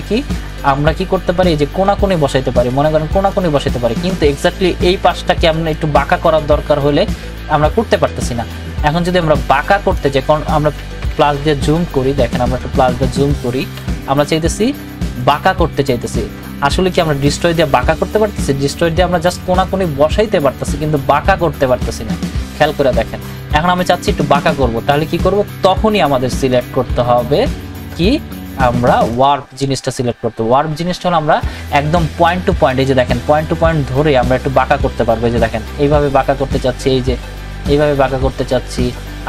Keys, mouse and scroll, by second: 0.4-11.0 drag, 11.0 ctrl+=, 12.5 scroll down 1, 13.8 ctrl+=, 16.9-26.4 drag, 26.4 right click, 29.1 click, 29.1 click, 33.4 click, 33.4-39.2 drag.